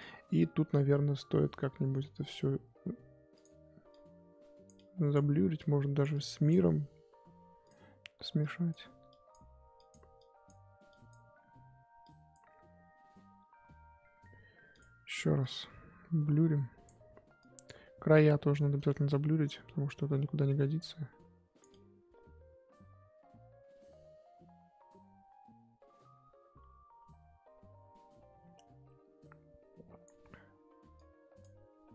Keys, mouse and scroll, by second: 3.4-31.9 drag.